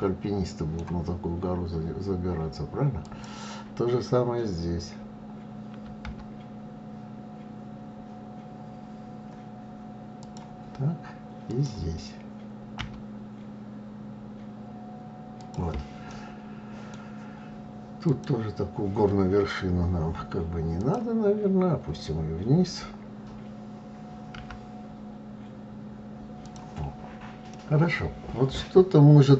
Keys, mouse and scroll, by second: 2.4 click, 10.9 click, 15.5-17.4 middle drag, 17.4 click, 20.2 click, 26.9-29.3 middle drag.